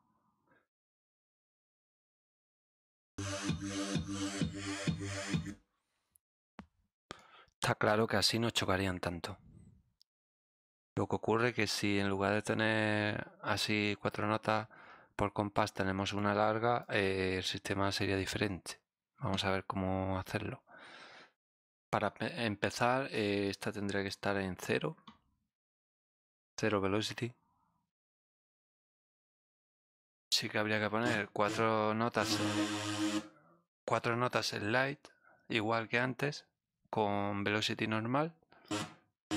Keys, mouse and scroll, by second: 1.9 click, 2.0 space, 3.2 click, 5.3 click, 7.1-10.2 drag, 15.5 right click, 16.8-17.9 drag, 21.4 click, 22.8 click, 23.4 click, 25.9 click, 27.9 click, 30.3 click, 31.0 click, 31.4 click, 32.1-33.1 drag, 38.6 click, 39.2 click.